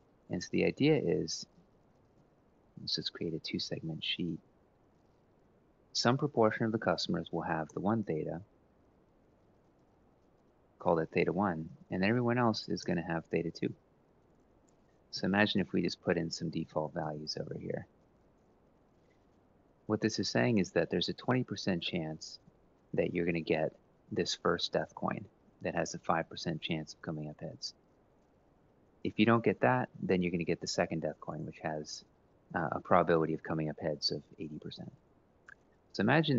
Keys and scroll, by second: 0.8-2.5 typing, 5.3-6.0 typing, 7.4 Return, 7.9 Up, 8.3 Down, 9.2-12.6 typing, 14.3-17.8 typing, 18.1 Return, 24.4-25.1 typing.